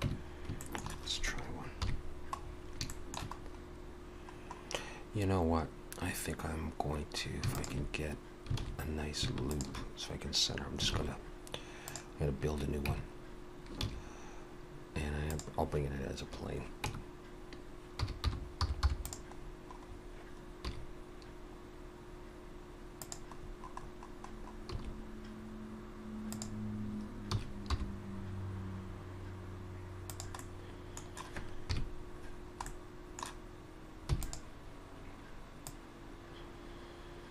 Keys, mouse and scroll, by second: 0.1 Tab, 0.6 shift+middle click, 1.8 KP_3, 2.4-3.6 scroll up 6, 2.9 shift+middle click, 4.4-4.9 scroll up 1, 7.6 alt+shift+click, 8.6 alt+a, 9.5 alt+shift+click, 11.0 shift+s, 12.9 Tab, 13.9 shift+a, 16.9 Tab, 18.0 r, 19.4-20.2 scroll down 7, 20.6 scroll down 1, 20.6 s, 23.4-24.7 scroll up 9, 24.7 s, 27.4 s, 30.3 middle click, 31.7 KP_Decimal, 32.4-33.4 scroll down 2, 32.7 middle click, 34.1 e, 35.7 click.